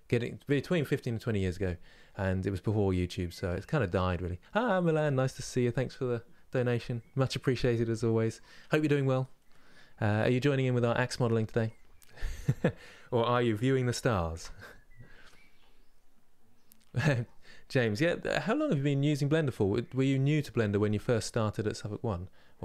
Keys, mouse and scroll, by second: 11.2-22.6 middle drag.